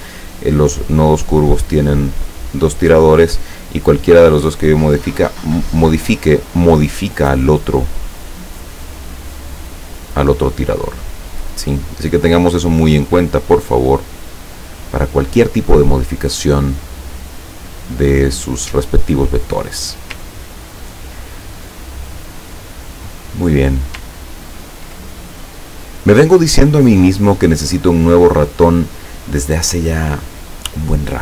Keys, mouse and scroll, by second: 4.2-8.1 drag, 8.7-10.9 drag, 11.2 middle click, 12.2 scroll down 1, 13.5-14.7 drag, 16.3-18.1 drag, 18.4 scroll down 1, 20.4 ctrl+scroll down 2, 22.1-23.8 ctrl+drag, 24.2-24.7 ctrl+scroll down 4, 25.3 ctrl+click, 27.8 click.